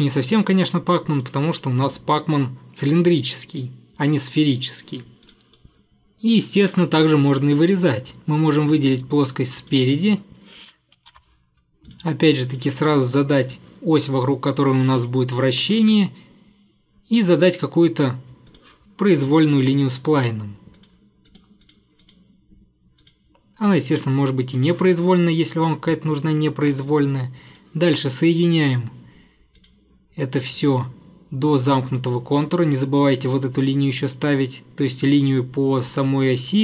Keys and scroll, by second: 4.7-5.4 typing, 11.1 ctrl+8, 15.4 Escape, 15.6 Escape, 24.1 Escape, 32.5 Escape.